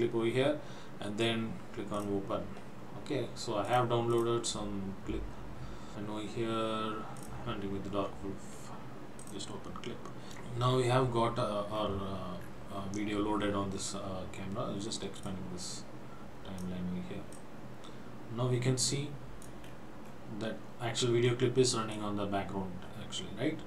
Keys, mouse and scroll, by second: 2.1 click, 3.7 click, 4.1 click, 9.2 click, 10.3-11.3 scroll down 6, 12.5 scroll down 4, 15.3 click, 17.5 click, 20.0 scroll down 4, 20.6 scroll up 2, 22.1 click.